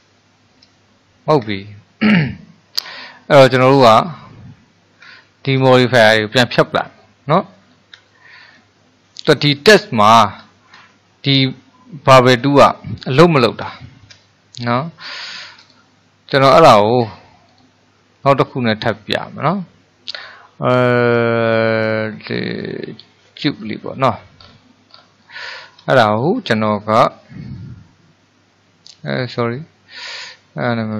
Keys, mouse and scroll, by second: 0.3-7.8 shift+middle drag, 7.8-8.3 scroll up 1, 8.3-9.5 shift+middle drag, 9.5-10.3 scroll up 2, 10.3-11.0 scroll down 2, 11.0-13.4 shift+middle drag, 13.4-13.9 scroll down 2, 13.9-14.9 shift+middle drag, 14.9-15.3 scroll up 1, 15.3-15.7 shift+middle drag, 15.7 click, 17.6 click, 18.7-20.2 middle drag, 20.2-23.3 drag, 24.4-25.9 scroll down 7, 25.9-29.0 shift+middle drag, 29.2 click, 30.1 click.